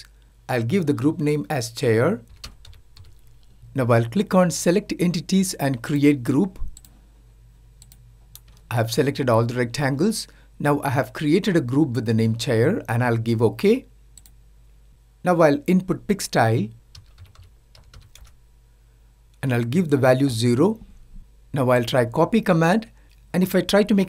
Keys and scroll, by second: 15.7-16.6 typing.